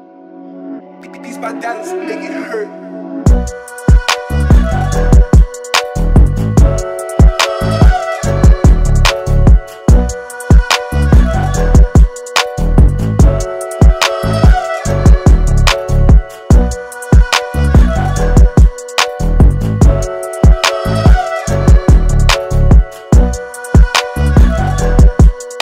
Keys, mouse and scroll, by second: 3.8 click, 4.6 click, 6.6 alt+scroll down 1, 7.0 space, 7.0 click, 11.0 alt+scroll up 1, 11.4 space, 11.5 click, 13.4 b, 14.2 right click, 16.6 click, 21.1 space, 21.3 click, 21.6 space, 22.5 click, 22.6 space, 23.1 right click, 24.0 click, 24.5 alt+scroll down 1.